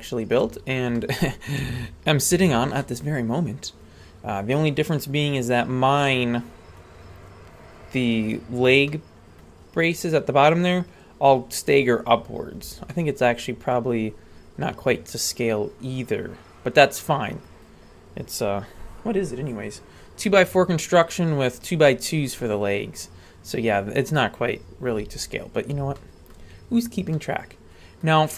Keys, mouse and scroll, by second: 0.5 scroll down 1, 1.0 middle click, 1.6 a, 2.3 a, 2.8-6.8 middle drag, 8.9 middle click, 12.9-17.5 middle drag, 26.0 shift+middle click, 27.1-28.1 middle drag.